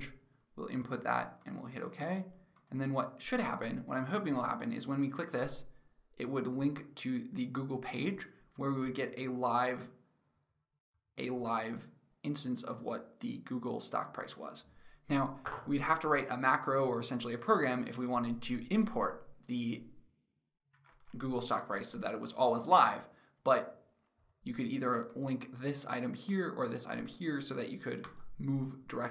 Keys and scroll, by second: 20.4 alt+Tab.